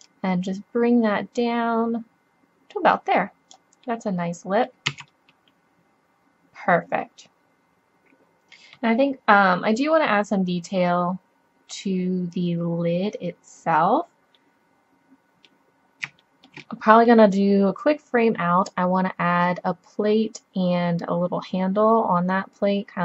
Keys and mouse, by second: 0.0 click, 2.1-3.9 middle drag, 4.9 z, 7.2 middle click, 15.2-18.6 middle drag.